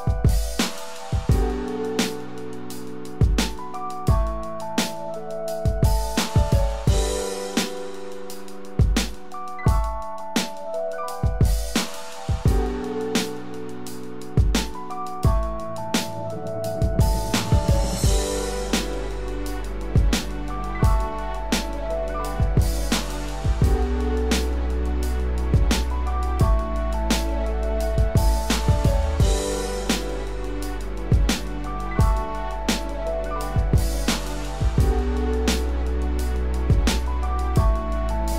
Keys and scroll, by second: 6.5 ctrl+alt+z, 22.6 ctrl+alt+z.